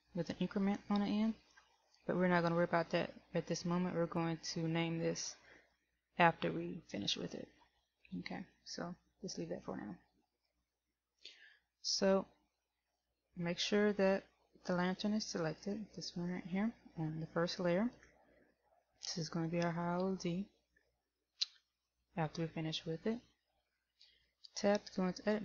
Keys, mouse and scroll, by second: 15.6 right click.